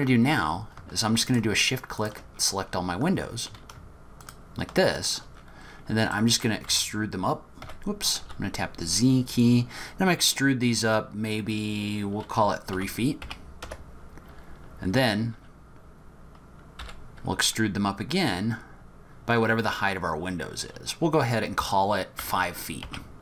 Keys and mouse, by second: 2.0 shift+click, 5.5 middle click, 6.1 middle click, 6.3 click, 6.7 z, 8.2 e, 16.8 e.